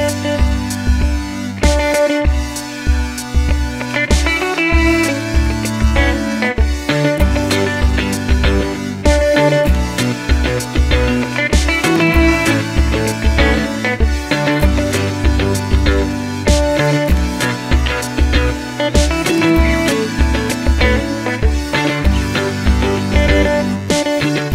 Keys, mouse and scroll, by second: 0.7 scroll up 1, 5.7-6.3 scroll down 1, 6.3 Tab, 8.3 click, 12.2-17.7 shift+drag, 15.6 x, 19.9-24.5 middle drag, 21.2 KP_3, 22.4 e.